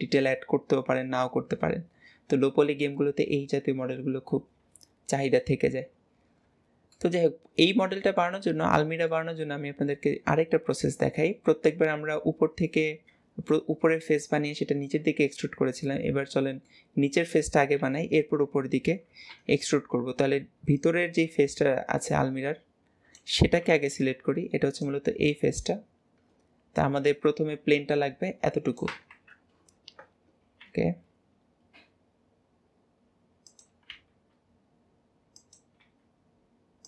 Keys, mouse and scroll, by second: 7.0-10.7 middle drag, 11.8-13.4 middle drag, 15.1-17.8 middle drag.